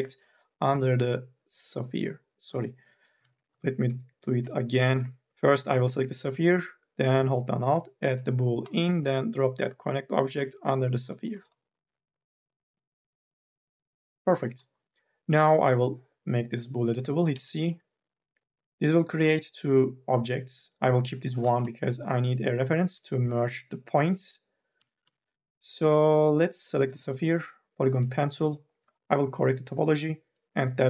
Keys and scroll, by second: 3.4 ctrl+z, 4.4 ctrl+z, 17.1 c, 24.6 1, 24.9 e.